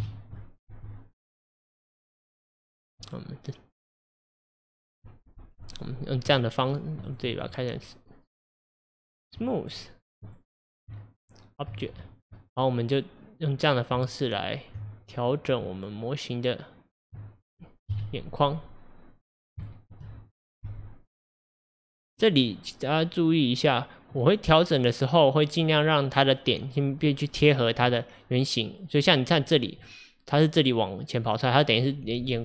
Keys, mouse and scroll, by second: 0.0 KP_7, 0.7 g, 3.1-5.8 middle drag, 5.8 click, 6.3 click, 6.6-7.1 right drag, 7.1 click, 7.3 click, 7.8 Tab, 9.7-10.9 right drag, 10.9 Tab, 12.0-12.4 middle drag, 12.4 click, 14.0 Tab, 15.7 Tab, 17.9 KP_1, 18.6-19.3 scroll up 2, 19.3 click, 19.7 shift+middle click, 20.7 g, 23.3 click, 24.2-32.4 middle drag.